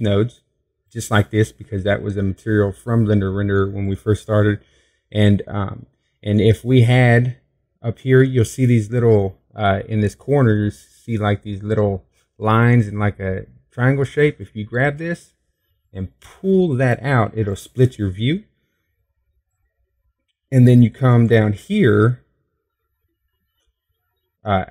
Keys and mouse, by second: 14.1-15.1 drag, 20.6 click, 22.5-23.9 middle drag.